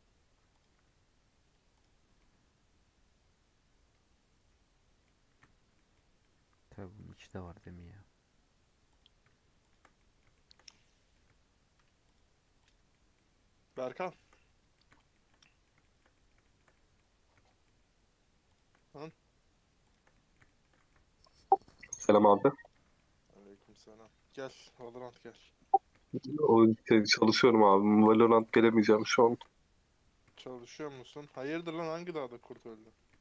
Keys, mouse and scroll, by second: 0.5 alt+click, 1.7 right click, 1.9 scroll down 4, 2.1-5.0 middle drag, 5.0-5.3 scroll up 2, 5.3-8.9 shift+middle drag, 8.9 click, 9.9-12.1 middle drag, 12.1 shift+click, 12.6 shift+click, 12.8 shift+middle click, 13.7-14.1 scroll down 3, 14.1 shift+middle click, 14.4-14.8 scroll up 1, 14.8-17.1 middle drag, 17.1-17.5 scroll up 1, 17.5-18.6 shift+middle drag, 18.6 shift+click, 18.7-19.9 middle drag, 19.9 shift+click, 20.1-22.7 shift+middle drag, 22.7 right click, 22.8 scroll down 1, 22.9 middle click, 23.5-23.8 scroll up 4, 24.0-24.9 scroll down 3, 24.9 alt+click, 25.2 middle click, 25.4-26.0 scroll up 3, 26.0-27.1 shift+middle drag, 27.1 shift+click, 27.2 scroll down 1, 27.3-29.5 middle drag, 29.5-30.2 scroll up 6, 30.4 shift+middle click, 30.7-32.6 scroll up 2, 32.6 right click, 32.8 middle click.